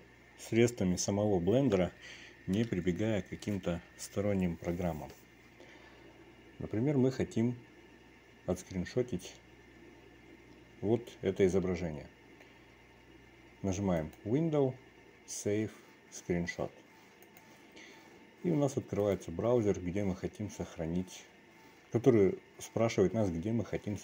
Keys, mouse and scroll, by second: 14.9-18.5 drag.